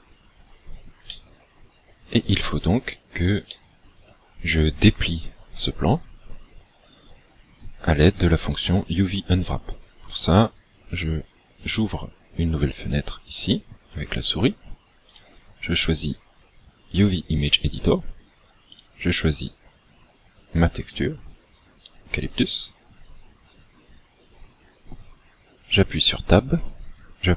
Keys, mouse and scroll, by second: 1.2 middle click, 3.6 middle click, 11.7 click, 15.2 click, 18.7 click, 21.6-22.2 scroll down 5, 25.9 Tab.